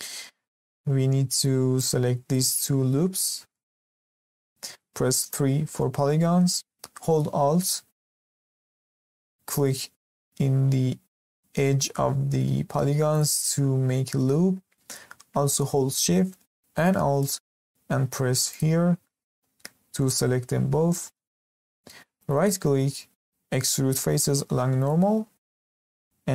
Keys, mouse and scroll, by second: 3.2 scroll up 1, 3.5-5.2 shift+middle drag, 5.2 3, 13.1 alt+click, 18.5 alt+shift+click, 21.2-21.7 scroll down 1, 21.7-22.2 scroll up 1, 22.2-25.9 right drag.